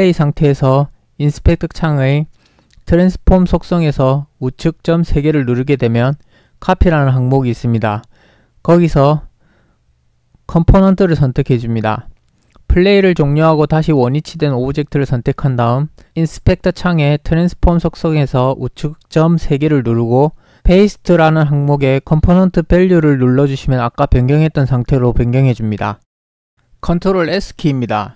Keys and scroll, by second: 15.0 ctrl+p.